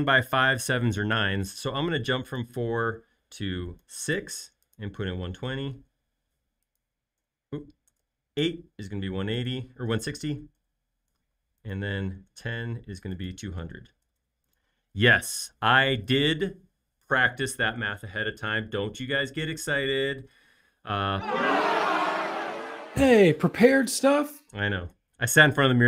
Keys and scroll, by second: 3.9-8.0 typing, 9.6-11.1 typing, 12.1 typing, 13.3-14.7 typing.